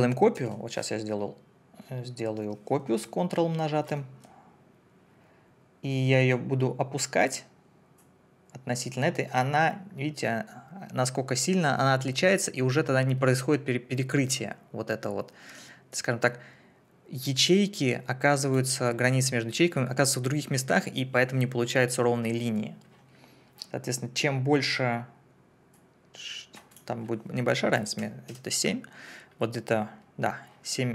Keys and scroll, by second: 0.3 ctrl+d, 27.7 KP_Subtract, 28.0 7, 28.3 Return.